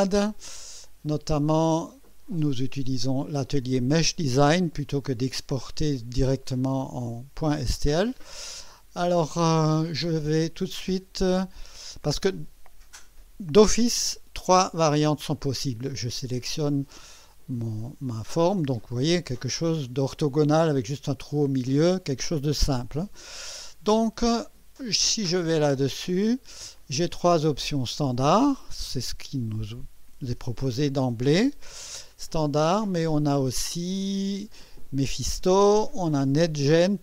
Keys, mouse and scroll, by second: 25.8 click, 32.1-34.5 drag, 35.4 click, 36.6 click.